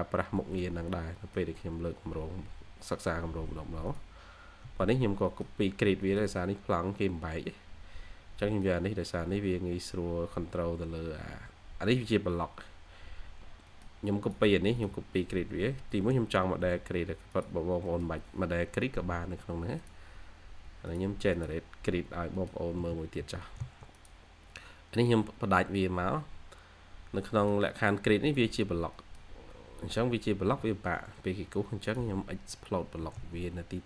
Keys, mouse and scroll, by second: 0.0 scroll down 1, 0.3 middle click, 0.6-1.1 scroll down 1, 1.1 middle click, 1.6 scroll up 1, 2.3 scroll down 1, 2.4-3.0 scroll up 1, 4.6 space, 4.8 scroll down 1, 4.9 scroll up 1, 5.2 middle click, 5.4 scroll down 1, 6.0 middle click, 6.5 scroll up 1, 7.9 scroll down 1, 8.3 scroll up 1, 8.4 middle click, 9.0-9.9 scroll up 1, 12.2-13.3 scroll down 1, 13.6 middle click, 15.1 middle click, 15.8-16.4 typing, 17.8 middle click, 18.6 Escape, 20.6 Escape, 21.2 double click, 22.7 middle click, 22.9-23.6 typing, 25.5-26.1 scroll up 2, 25.6-27.7 typing, 26.9-27.2 scroll down 1, 27.7-28.3 scroll down 1, 30.4-31.4 scroll up 1, 31.4 Escape.